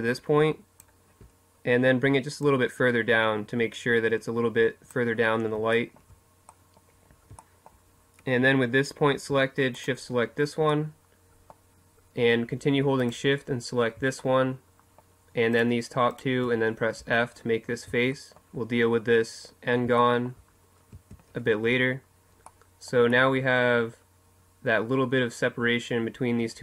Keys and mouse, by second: 1.1-3.0 drag, 4.4-6.5 middle drag, 8.5 right click, 9.4 middle click, 11.7-12.9 right drag, 15.7 f, 16.4 middle click, 18.7 middle click, 19.6 a, 20.2 Tab.